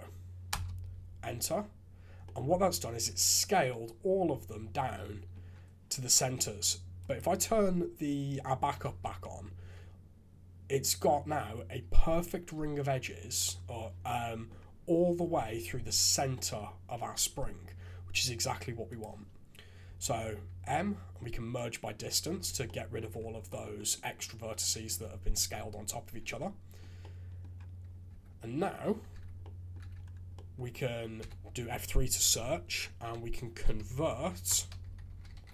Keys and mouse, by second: 2.2 middle click, 3.0 1, 3.6-5.3 middle drag, 7.0 click, 8.8 shift+z, 9.2-13.2 drag, 14.0 click, 16.3 click, 17.1 shift+z, 18.9 click, 19.8 m, 22.4 alt+a, 22.6 click, 23.5 click, 26.1 a, 26.4 click, 27.0 middle click, 27.1 click, 28.1 Tab, 29.1 shift+z, 29.4 drag, 29.8 shift+z, 30.4 click, 31.2 F3.